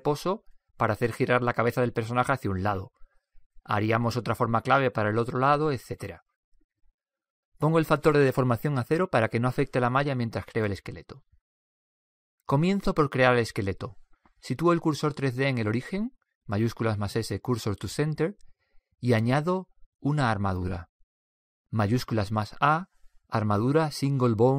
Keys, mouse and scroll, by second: 9.1-10.8 drag, 10.9 click, 12.7-14.5 drag, 16.9 shift+s, 21.4 shift+a.